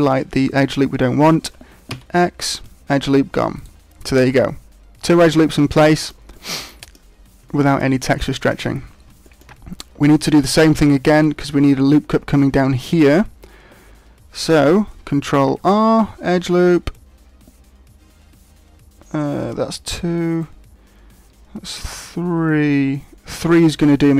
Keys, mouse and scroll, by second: 1.9 x, 3.5 right click, 5.9 shift+middle click, 6.3 middle click, 7.6 shift+middle click, 8.3 shift+middle click, 8.7-9.0 scroll down 2, 9.2 shift+middle click, 15.3 ctrl+r.